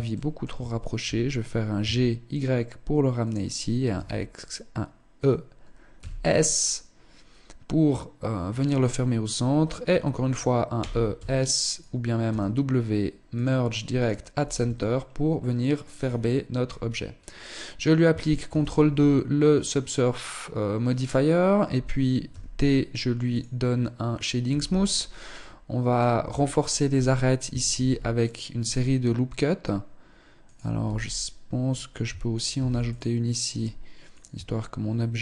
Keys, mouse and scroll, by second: 0.4 g, 3.3 e, 10.1 e, 11.6 w, 14.0 Tab, 14.8 middle click, 15.3-16.0 scroll down 6, 16.0-17.2 scroll up 3, 17.8 ctrl+2, 21.6 t, 22.7 click, 23.8 t, 24.3-24.7 scroll up 2, 24.7 middle click, 25.6 Tab, 25.8-26.8 scroll up 1, 26.8 scroll up 1, 27.1 ctrl+r, 30.2 z, 31.9 ctrl+r, 33.7 Tab, 34.7 z.